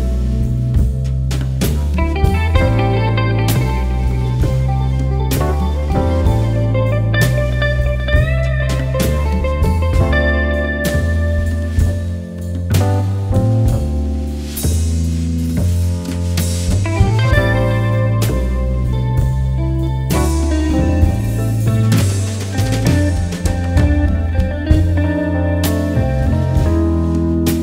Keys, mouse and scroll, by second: 0.6-2.6 shift+drag, 2.6-4.5 drag, 8.0 click, 11.6-18.8 drag, 20.7 click, 22.5 click, 23.4 ctrl+z, 23.7 click, 24.5-24.9 scroll up 1, 25.0 click, 25.8 alt+scroll up 1, 26.1 click, 26.2 alt+scroll down 1, 26.6 click, 27.5 click.